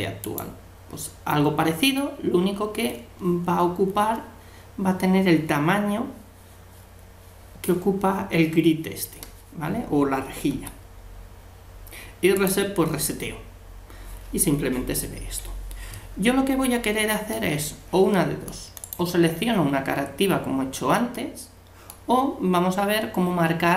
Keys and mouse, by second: 10.5 u, 15.9-18.8 middle drag, 18.8-20.6 right drag, 21.1-22.9 middle drag.